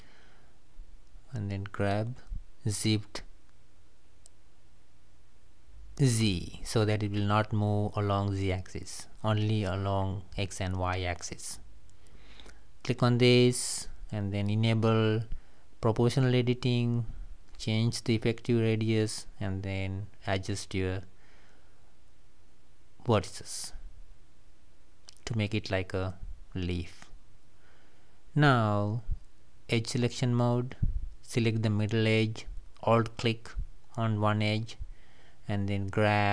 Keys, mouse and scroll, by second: 0.6 g, 2.9 click, 4.9 shift+click, 6.7 g, 10.0 click, 11.3 click, 13.5 g, 23.4 click, 25.0 g, 30.0 scroll down 2, 30.2-32.1 middle drag, 32.1 click, 32.6 click, 34.3 click, 35.8 alt+click.